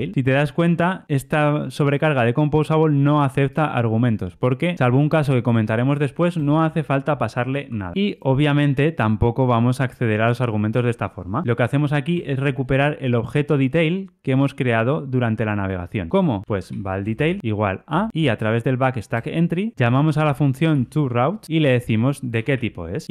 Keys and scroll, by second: 19.1 Return, 21.4 Return.